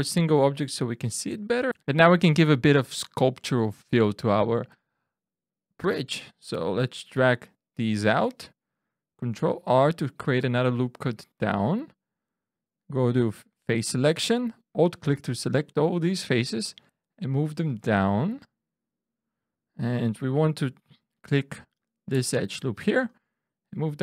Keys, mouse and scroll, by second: 0.9 middle click, 1.7 ctrl+z, 1.7 scroll up 1, 5.0 shift+middle click, 5.8 shift+scroll down 1, 6.7 click, 9.3 ctrl+r, 11.3 click, 13.7 3, 14.8 alt+click, 16.3 click, 20.1 2, 21.7 alt+click, 23.0 click.